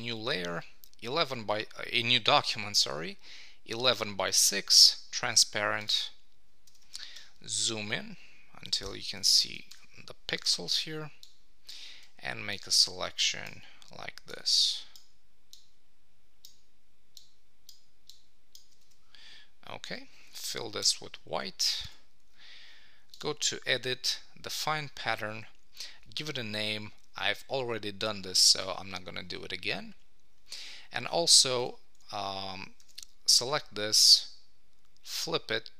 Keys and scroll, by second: 7.2 super+=, 11.1 super+=, 20.8 super+BackSpace, 21.6 super+d, 30.6 Escape, 32.8 super+t.